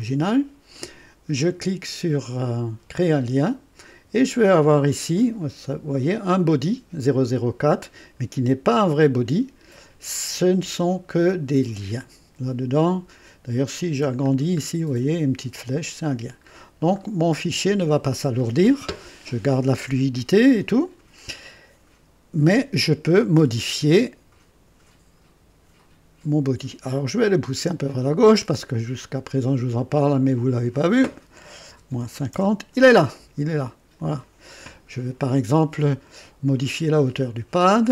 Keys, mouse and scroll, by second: 2.9 click, 5.1 click, 5.7 scroll down 2, 14.1 alt+scroll up 1, 16.9-17.5 alt+scroll down 2, 26.8 alt+click, 30.1 click, 31.6 KP_Subtract, 32.0 KP_5, 32.3 KP_0, 33.9 click, 36.5 click.